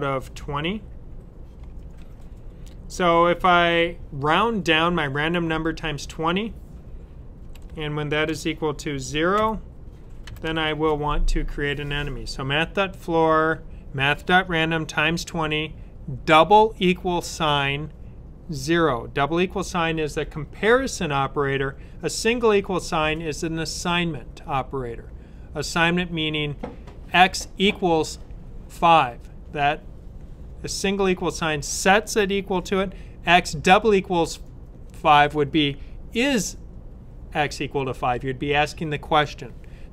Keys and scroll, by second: 1.9 typing, 7.3-8.2 typing, 9.2-10.2 typing.